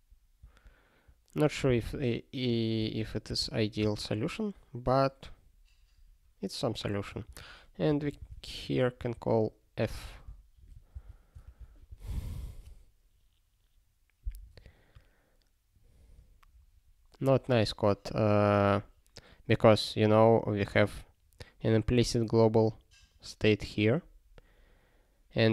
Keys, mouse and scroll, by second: 0.4 alt+w, 1.7 super+b, 2.8 ctrl+y, 3.4 ctrl+s, 3.8 space, 7.2 (, 8.3 ctrl+s, 9.0 ctrl+n, 10.1 alt+&, 18.6 click, 21.9 click.